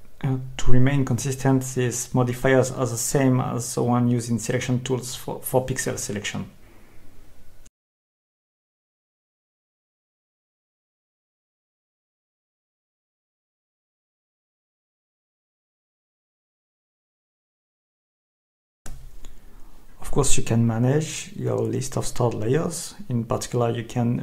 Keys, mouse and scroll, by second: 0.4 ctrl+shift+click, 5.9 click, 6.8 click, 8.9 Escape, 10.6 click, 12.0-12.4 scroll up 2, 13.5 scroll down 2, 21.7 click.